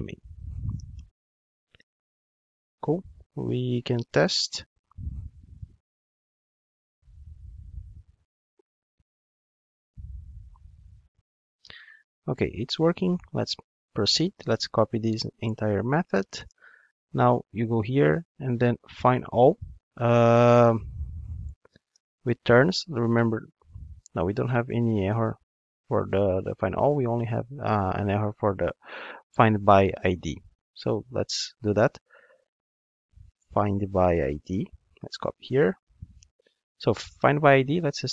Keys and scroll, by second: 1.7 alt+super+l, 4.1 ctrl+shift+d, 14.1 super+c, 23.6 ctrl+Tab, 28.5 ctrl+Tab, 33.3 ctrl+Tab, 34.7 super+c, 35.1 ctrl+Tab, 36.4 super+v.